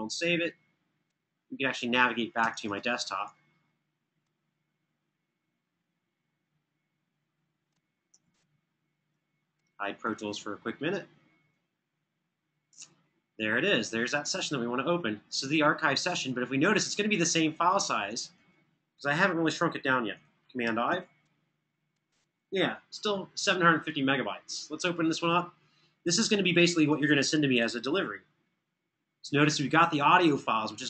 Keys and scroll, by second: 7.9 super+Tab, 20.6 super+i.